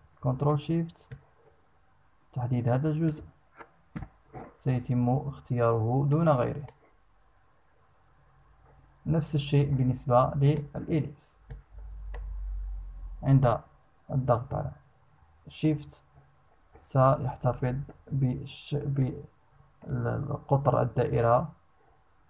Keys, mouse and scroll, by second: 0.7-2.8 ctrl+shift+drag, 3.5 Return, 5.7 click, 10.0 click, 11.0-22.2 drag.